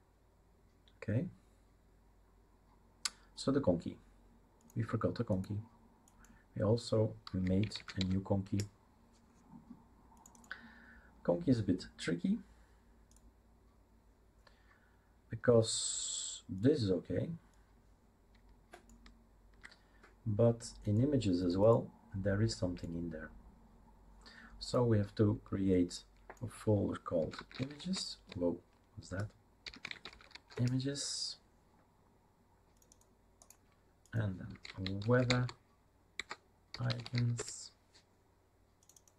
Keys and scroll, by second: 7.2-8.5 typing, 27.1-30.8 typing, 34.3-37.6 typing.